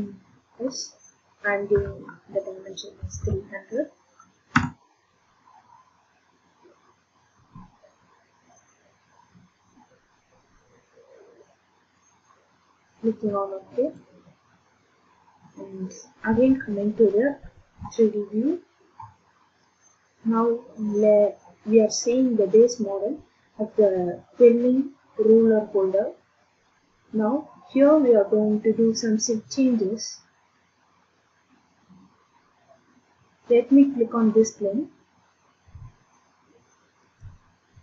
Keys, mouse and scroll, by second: 1.7 3, 3.0 0, 3.2 0, 4.5 Return, 6.8 middle click, 7.0 middle click, 7.5-9.6 scroll down 8, 9.8 scroll, 12.0 middle click, 12.2 scroll down 6, 14.0 click, 17.6 ctrl+d, 32.5 middle click, 37.2 click, 37.2 scroll.